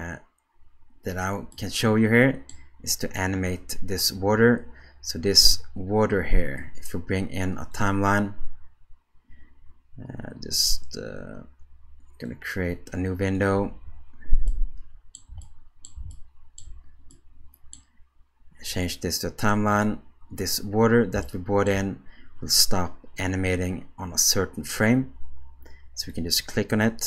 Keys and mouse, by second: 1.6-2.5 middle drag, 7.8-9.3 drag, 12.3-13.4 drag, 13.7 space, 14.5-15.1 shift+middle drag, 15.4 middle click, 16.1-16.6 shift+middle drag, 17.1 middle click, 18.7-19.8 drag, 21.2-21.7 shift+middle drag, 26.0 click.